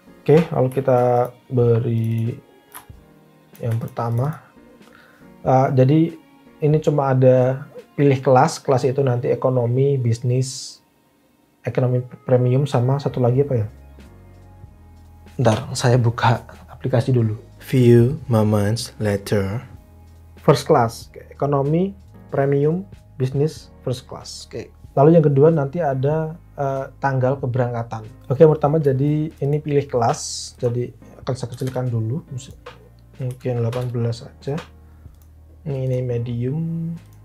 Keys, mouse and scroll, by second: 31.2-32.0 typing, 33.3 1, 33.6 8, 33.7 Return, 35.2 typing.